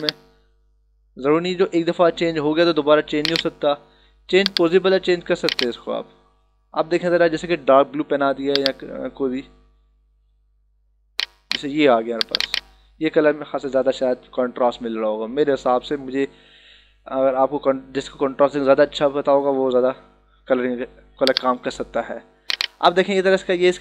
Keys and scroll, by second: 13.9 ctrl+-, 19.3 ctrl+=, 23.1 ctrl+-.